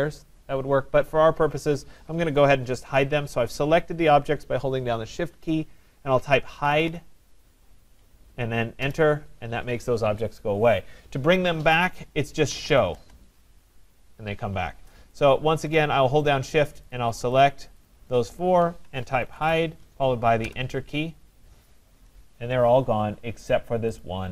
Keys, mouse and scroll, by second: 4.5 right click, 6.4-7.5 typing, 8.8 Return, 12.2-13.8 typing, 15.2 ctrl+click, 16.4 shift+click, 16.9 shift+click, 17.5 shift+click, 17.8 shift+click, 18.4 shift+click, 20.5 Return.